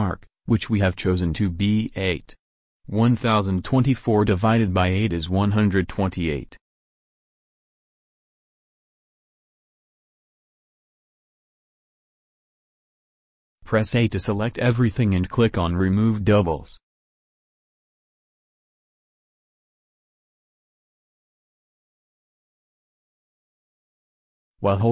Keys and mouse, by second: 1.5-10.5 drag, 10.5 middle click, 13.6 a, 13.9 a.